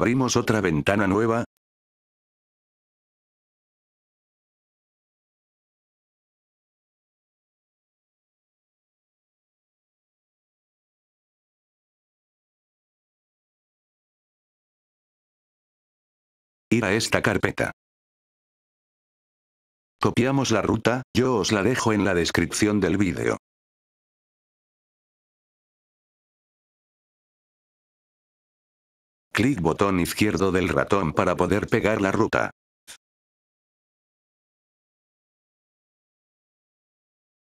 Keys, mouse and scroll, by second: 0.3 right click, 3.9 click, 6.5-8.1 drag, 9.6 click, 12.7-15.0 drag, 16.3 F8, 16.5 click, 18.5 click, 19.6 F8, 19.8 click, 21.0-22.5 drag, 23.1-24.4 drag, 24.9 F8, 25.2 right click, 27.4 click, 28.6 F8, 29.1 click, 31.0 click, 32.8 click, 34.5 click, 35.1 right click, 37.0 F8, 37.3 click.